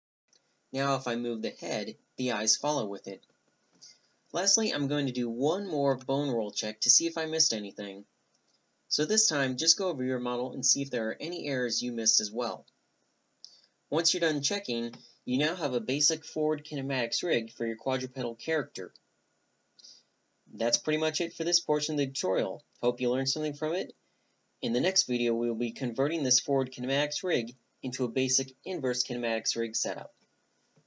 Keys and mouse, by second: 0.8 r, 2.2-2.7 middle drag, 2.5 r, 3.2-3.8 right drag, 3.3 g, 4.1 middle click, 4.8 alt+h, 5.1 a, 5.2 Tab, 5.5 click, 5.8 a, 6.1 alt+h, 6.3 a, 7.0 z, 8.8 right click, 9.0 right click, 10.3 Tab, 11.3-12.6 drag, 12.6 middle click, 13.0 right click, 13.1 click, 13.2 click, 13.3 right click, 13.4 click, 13.7 click, 14.2 ctrl+n, 15.3 ctrl+n, 16.1 z, 16.3 middle click, 17.0 z, 17.4 ctrl+n, 18.5 ctrl+n, 19.2 z, 19.4 z, 19.7 click, 20.3 click, 20.6 a, 22.1 middle click, 22.6 click, 22.9 z.